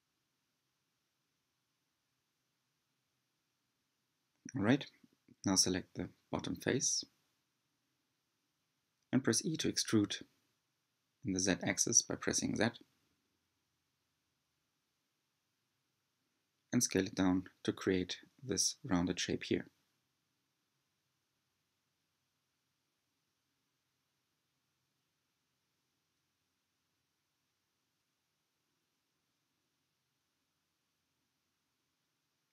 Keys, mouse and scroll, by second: 3.5-5.4 middle drag, 5.4 3, 5.5 click, 6.0-7.4 middle drag, 7.4 click, 8.7 e, 11.9 s, 14.2 click, 15.3 s, 18.5 e, 20.7 s, 25.2 g, 28.6-29.9 middle drag, 29.9 click, 31.7 click.